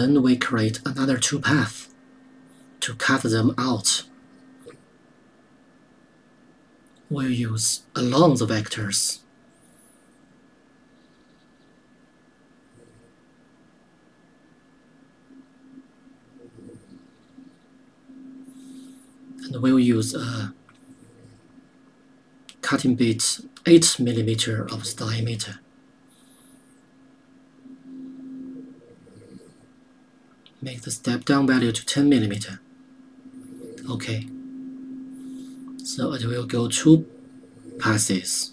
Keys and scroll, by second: 24.2 KP_8, 32.3 KP_1, 32.3 KP_0.